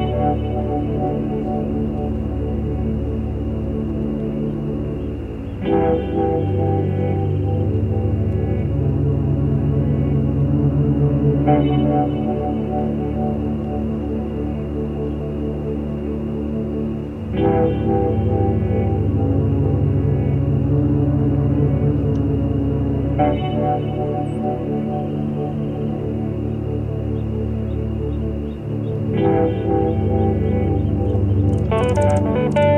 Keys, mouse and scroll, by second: 1.2 click, 2.4 click, 3.9 click, 4.7 middle click, 6.9 click, 7.2 middle click, 10.0 shift+click, 10.4 shift+click, 11.4 shift+click, 12.0 shift+click, 12.7 shift+click, 13.1 shift+click, 13.8 shift+click, 14.1 shift+click, 14.6 shift+click, 14.9 shift+click, 17.4 click, 17.8 shift+click, 18.1 shift+click, 18.6 ctrl+shift+z, 19.7 ctrl+shift+click, 20.1 ctrl+shift+click, 22.4 shift+click, 25.5 shift+click, 26.7 shift+click, 27.6 shift+middle click, 29.6 click, 30.6 click, 31.0 click, 31.6 ctrl+z, 32.3 F6.